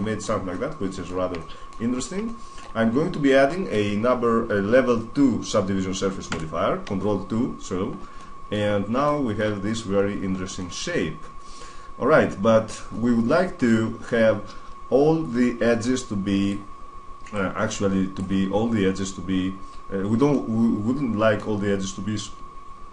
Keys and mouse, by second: 1.7-4.6 middle drag, 6.1 ctrl+2, 7.7 middle click, 8.4-8.9 middle drag, 9.3-12.1 middle drag, 12.7-15.5 middle drag, 15.5-17.6 drag, 17.6 middle click, 17.7 click, 17.8 middle click, 17.9 click, 18.0 middle click, 18.1 drag, 18.2 middle drag, 18.3 drag, 18.4-19.4 middle drag, 20.3 middle click, 21.5 middle drag, 21.9 middle click, 22.8-22.9 middle drag.